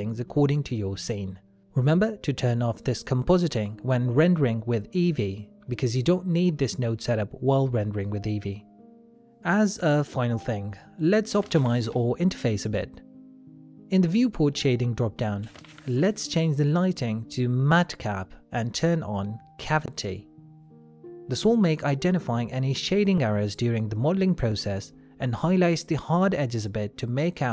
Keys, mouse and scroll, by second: 15.9 shift+middle click, 16.0 middle click, 17.4 click, 22.3 shift+middle click, 23.1 middle click, 24.2 shift+middle click, 25.1 middle click, 27.4 shift+middle click.